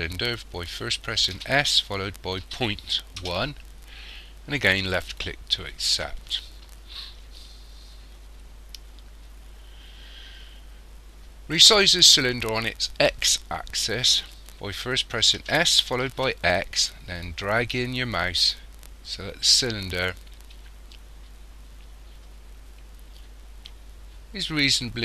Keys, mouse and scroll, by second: 1.3 s, 15.4 s.